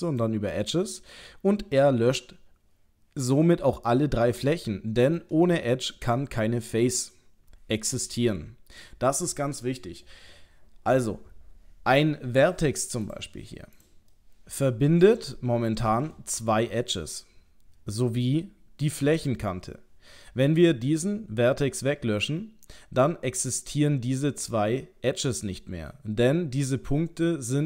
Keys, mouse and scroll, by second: 1.0 middle click, 4.6 middle click, 6.2 middle click, 13.1 click, 13.8 click, 13.8 click, 14.1 middle click, 15.4 shift+middle click, 16.2 ctrl+middle click.